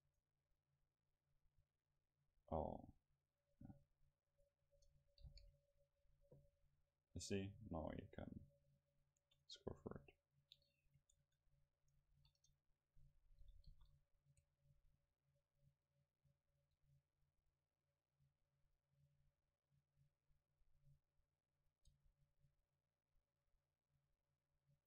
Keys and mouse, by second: 4.5-6.4 right drag, 5.3 ctrl+t, 9.4-11.2 right drag, 10.3-12.7 drag, 11.3 Tab, 12.1 ctrl+s, 13.7 KP_0, 17.3-19.5 middle drag, 22.1-24.8 middle drag.